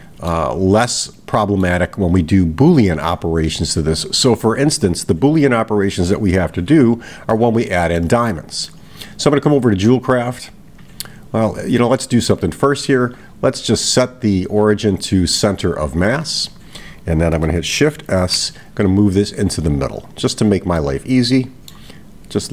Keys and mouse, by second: 1.0-1.8 middle drag, 7.4-8.2 middle drag, 8.3-8.9 middle drag, 10.7 click, 12.2 click, 13.1 click, 13.9-16.2 right drag, 20.8-21.8 middle drag.